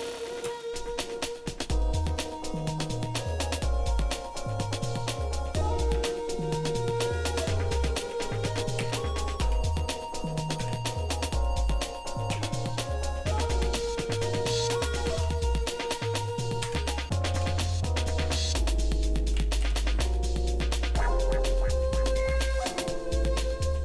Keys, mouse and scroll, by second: 2.2 shift+middle click, 3.4 shift+middle click, 5.9 Tab, 8.0 r, 17.5 ctrl+z, 18.2 Tab, 19.6 g.